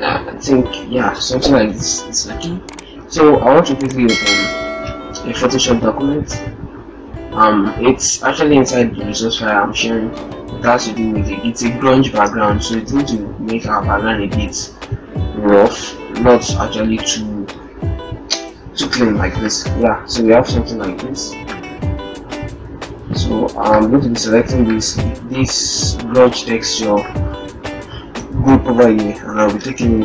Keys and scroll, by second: 3.7 ctrl+o.